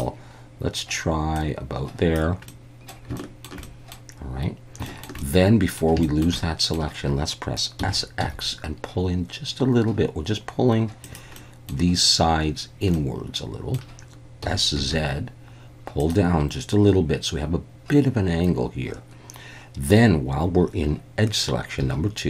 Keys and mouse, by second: 1.4 click, 2.5 middle click, 3.2 shift+middle click, 3.6 middle click, 4.9 shift+middle click, 5.2 middle click, 6.0 shift+middle click, 6.4 middle click, 7.8 s, 8.2 x, 11.0 click, 11.4 middle click, 12.9 middle click, 14.4 s, 14.8 z, 16.0 click, 21.8 2.